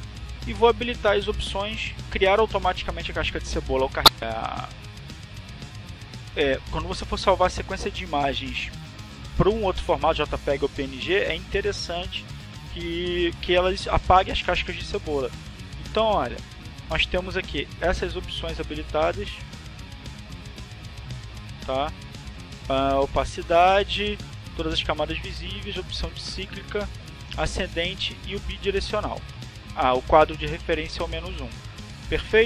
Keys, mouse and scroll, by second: 0.1 click, 0.9 click, 15.9 click, 17.1 click, 18.2 click, 19.3-20.9 drag, 21.5 click, 22.4 click, 25.3 click, 26.1 click, 28.0-29.0 drag, 30.2 click.